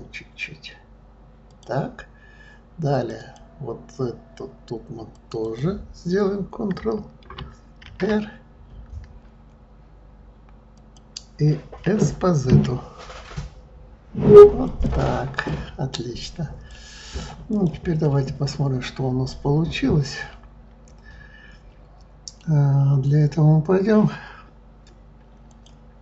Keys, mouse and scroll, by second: 2.9 click, 3.1 click, 5.1 click, 5.4 click, 7.8 ctrl+r, 15.3 click, 16.7-17.5 right drag, 17.5 click, 18.0-21.0 middle drag, 25.5 click.